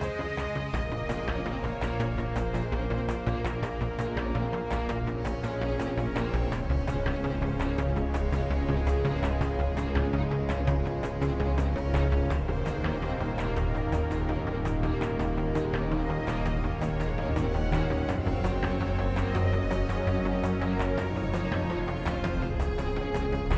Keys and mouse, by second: 0.0 z, 0.3-0.6 middle drag, 1.9 alt+z, 2.0 a, 5.0 shift+b, 5.7 ctrl+b, 6.0 shift+z, 6.3 shift+a, 9.2 shift+a, 10.6 x, 10.6 shift+a, 19.7-20.5 drag, 19.7 shift+a, 22.5-23.4 drag, 22.5 shift+a.